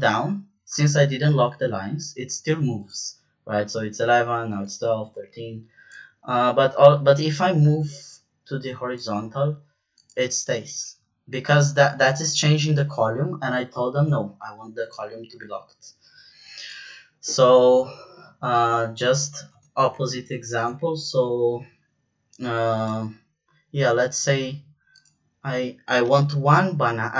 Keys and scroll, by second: 19.4 BackSpace, 25.9 =.